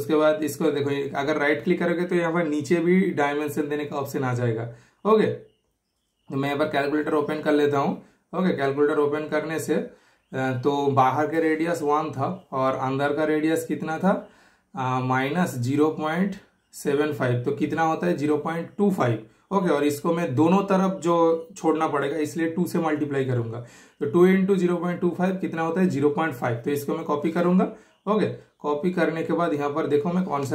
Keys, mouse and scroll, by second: 0.1 super+click, 0.5 super+right click, 1.6 super+click, 5.3 super+click, 5.3 typing, 10.8 super+click, 10.8 typing, 14.0 super+click, 14.0 typing, 18.6-19.3 typing, 18.8 super+right click, 19.5 super+click, 22.7 typing, 22.7 super+click, 25.3 super+click, 27.0 super+right click, 27.8 super+click.